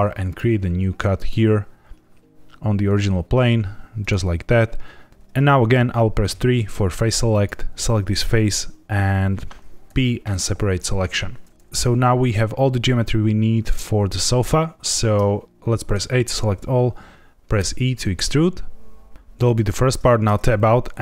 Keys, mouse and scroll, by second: 3.9 click, 6.2 3, 7.2 click, 9.8 p, 15.9 a, 17.5 e, 19.4 click, 20.2 Tab.